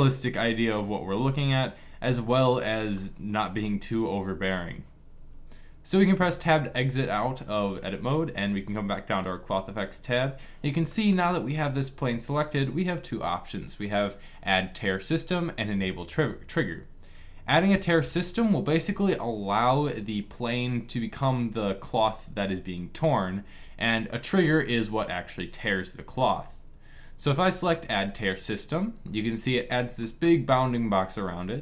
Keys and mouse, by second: 0.0-2.3 middle drag, 5.9 Tab, 28.0-29.7 drag, 29.7-31.6 middle drag.